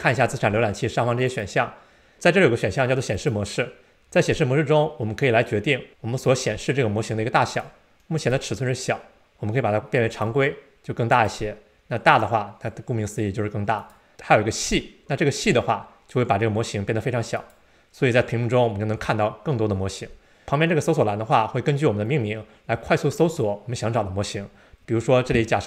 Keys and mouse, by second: 3.2-6.4 drag, 7.5-12.4 drag, 13.8-17.9 drag, 20.4-25.6 drag.